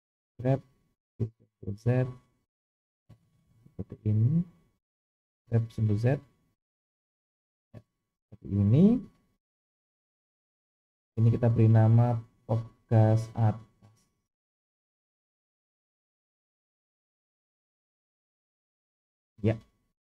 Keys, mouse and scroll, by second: 0.3 g, 4.3 click, 5.3 g, 9.4-10.4 scroll down 2, 11.4 click, 12.3-19.6 drag, 17.3 BackSpace.